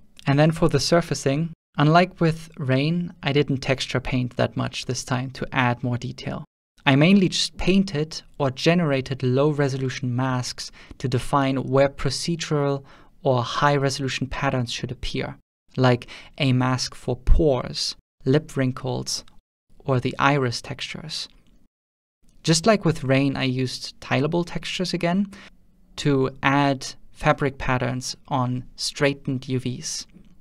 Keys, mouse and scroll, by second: 0.0 middle click, 0.0 click, 0.5 click, 0.5 shift+f, 1.9-3.9 shift+middle drag, 1.9 click, 4.4 click, 4.4 shift+f, 5.4 shift+middle click, 5.9 click, 5.9 f, 6.0 ctrl+middle click, 6.6 click, 6.6 f, 6.6 0, 7.8 ctrl+middle click, 8.4 ctrl+shift+click, 10.1-11.2 ctrl+shift+drag, 11.6-12.2 drag, 13.4 middle click, 16.5 x, 16.5 f, 17.8 click, 17.8 x, 19.6 click, 20.4 ctrl+shift+click, 22.0 ctrl+middle click, 22.3 scroll down 5, 22.3-22.8 scroll down 1, 22.8 scroll up 1, 23.0 click, 23.5 middle click, 23.6 alt+a, 24.0 middle click, 24.0 b, 24.0 g, 24.1 alt+a, 25.0 click, 25.1 scroll up 1, 25.3-26.7 drag, 26.8 scroll down 2, 27.0 click, 27.6 scroll down 3, 27.8 middle click, 28.0-28.6 scroll up 1, 28.6 shift+click, 28.6 scroll up 6, 29.3-30.0 scroll down 3, 29.6-30.2 shift+middle drag, 29.6-30.2 scroll up 6.